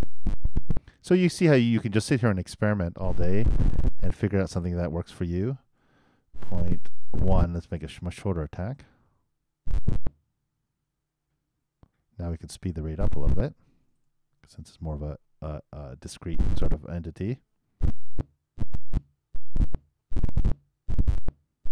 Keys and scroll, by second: 7.5 super+i, 8.0 super+Return, 14.6 super+i, 17.2 super+Return.